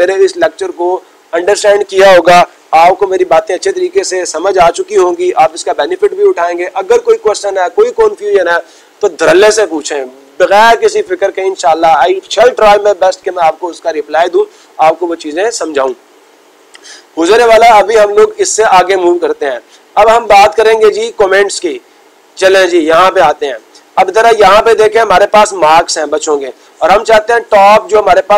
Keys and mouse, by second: 19.1 click, 22.0-23.0 drag, 23.6 click, 26.2-27.2 drag, 27.9-28.3 drag.